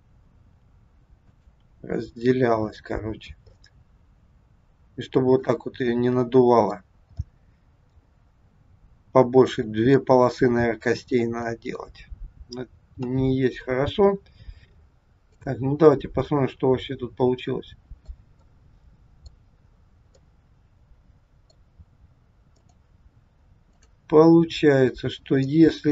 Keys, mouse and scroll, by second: 0.4 r, 1.7 r, 3.5 middle click, 5.8 scroll up 1, 5.9 middle click, 7.2 middle click, 8.3 scroll down 2, 9.5 middle click, 10.9 middle click, 13.0 KP_3, 15.3 click, 15.9 scroll down 2, 16.3 middle click, 18.4 middle click, 19.5-19.8 scroll up 5, 20.1 middle click, 22.7 click, 23.8 click, 25.4 middle click.